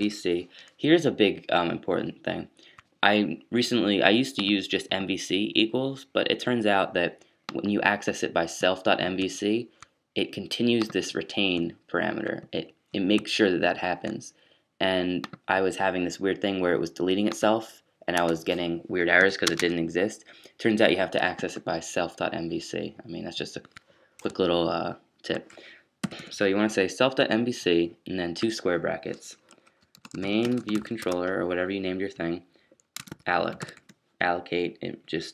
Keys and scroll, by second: 19.4 space, 27.6 typing, 29.9-30.8 typing, 31.0 ctrl+shift+Tab, 32.8-34.0 typing.